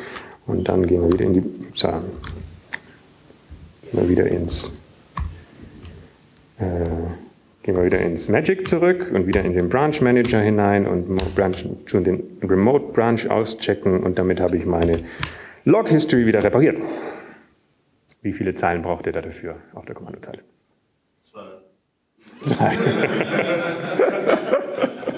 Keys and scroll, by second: 0.2-3.5 typing, 5.3-6.3 typing, 7.7-9.3 typing, 11.7-14.6 typing, 16.9-20.2 typing.